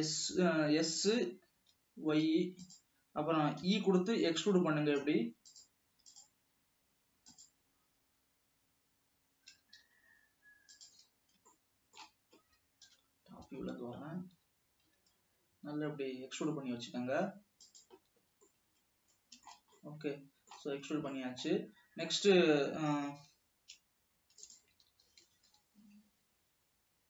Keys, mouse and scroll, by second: 3.9 e, 8.0 e, 8.5-9.4 scroll up 1, 9.7 g, 11.7 scroll down 2, 11.7-13.1 middle drag, 13.1 KP_7, 13.9-14.6 scroll down 2, 14.6 g, 18.7-21.1 middle drag, 21.1-21.4 scroll up 1, 21.4-23.5 middle drag, 23.5 g, 25.2 alt+a, 25.7 ctrl+r.